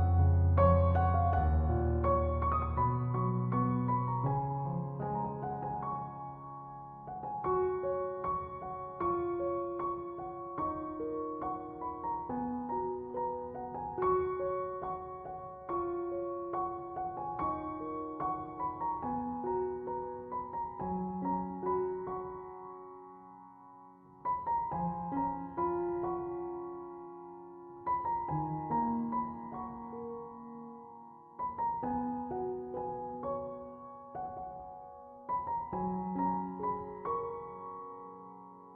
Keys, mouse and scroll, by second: 14.3 2, 14.5 5, 14.8 Return, 20.6 -, 21.1 Return, 29.3 ctrl+7.